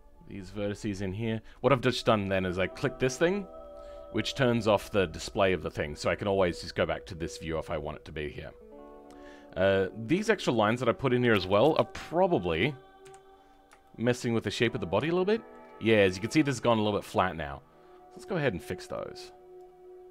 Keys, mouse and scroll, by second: 4.5-5.2 scroll down 13, 5.2-8.2 middle drag, 12.9 KP_3, 13.7 shift+middle click, 14.2-15.0 scroll up 10, 15.0 shift+middle click, 18.1-20.1 drag.